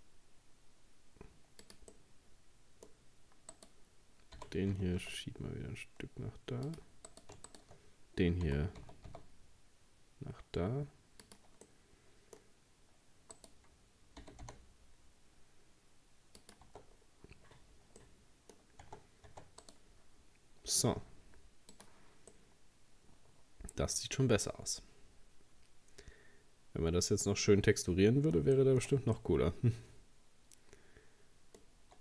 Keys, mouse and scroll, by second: 1.9-3.5 middle drag, 3.5 right click, 4.4 g, 7.1 right click, 7.5 shift+right click, 8.5 g, 11.7-13.4 middle drag, 13.4 right click, 14.2 g, 16.7 Tab, 16.9-17.7 scroll down 5, 18.0 middle click, 18.9 Tab, 19.3 Tab, 19.6 right click, 20.2-21.8 scroll down 2, 21.8 click, 22.3-25.3 middle drag, 28.6-31.8 shift+middle drag, 31.8-32.0 scroll up 2.